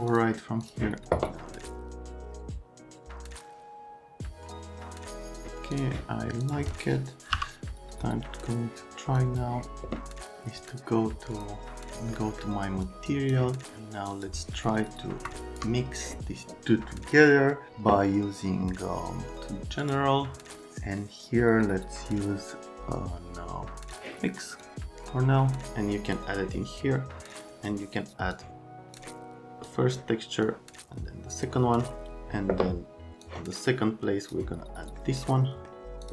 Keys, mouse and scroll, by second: 7.3 m, 8.3 right click, 9.2 click, 10.6 click, 11.3 click, 12.1 right click, 12.8 click, 14.1 click, 14.6 click, 15.2 click, 19.8 click, 23.9 click, 25.7 click, 33.2 click, 35.0 middle click, 35.5 right click, 36.0 click.